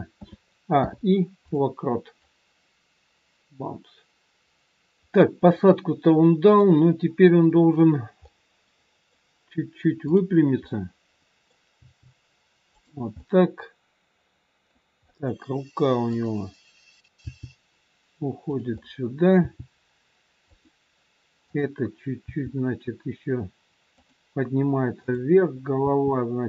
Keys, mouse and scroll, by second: 0.2 a, 0.7 i, 2.2 click, 5.7 middle click, 10.0 middle click, 10.0 click, 10.9 middle click, 11.5 click, 11.8 g, 13.2 middle click, 16.0 middle click, 16.0 click, 17.1 g, 18.6 middle click, 19.4 g, 21.5 click, 22.2 g, 25.1 click, 25.9 r.